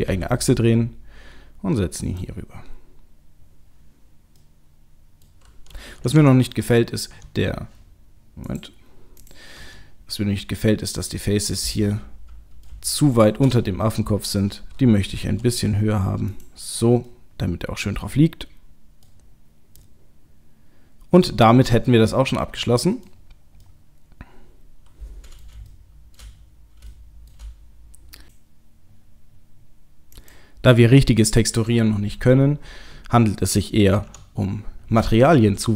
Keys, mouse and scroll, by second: 0.1 g, 4.4 middle click, 6.2 Tab, 7.1 Tab, 8.5 click, 9.2 click, 9.5 Tab, 11.5 click, 11.8 middle click, 13.2 shift+click, 13.6 middle click, 15.1 g, 17.1 middle click, 19.1 scroll up 1, 19.3-20.0 scroll down 2, 19.8 middle click, 21.4-22.8 scroll down 2, 21.9 middle click, 23.0 middle click, 23.2-25.5 scroll down 2, 23.7 middle click, 26.2 shift+middle click, 26.5 scroll up 1, 26.9 shift+middle click, 30.2 click, 34.1 Tab.